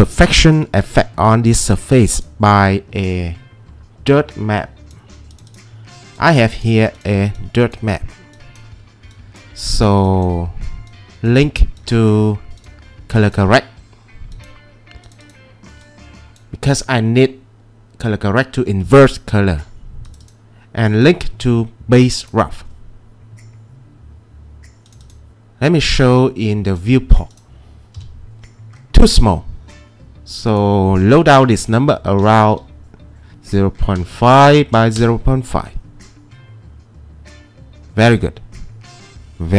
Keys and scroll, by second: 28.0 c, 34.0-35.0 typing, 34.2 Tab, 35.0 Return.